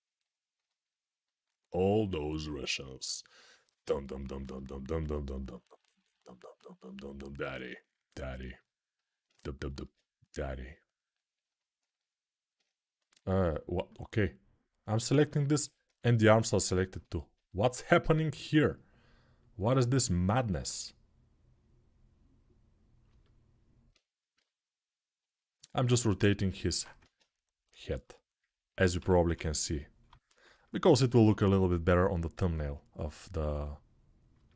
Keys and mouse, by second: 5.1 right click, 5.2-12.8 ctrl+alt+drag, 9.6 ctrl+Tab, 12.8 middle click, 13.3 click, 13.3 middle click, 13.8-16.3 drag, 16.3-19.2 shift+middle drag, 19.2-23.7 drag, 23.7-25.3 right drag, 24.1 g, 25.3-34.1 alt+middle drag, 26.8 ctrl+Tab, 27.8 alt+q, 28.7 g, 29.1-29.8 ], 32.1 g, 32.5-34.5 drag.